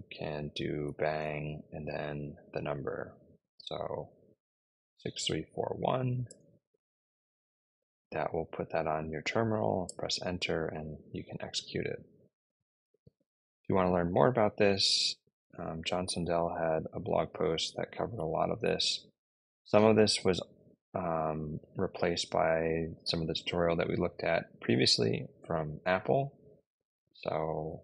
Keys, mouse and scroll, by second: 0.8 shift+1, 3.9-5.8 typing, 6.1 Return, 9.7 Return, 14.0 click, 15.3 click.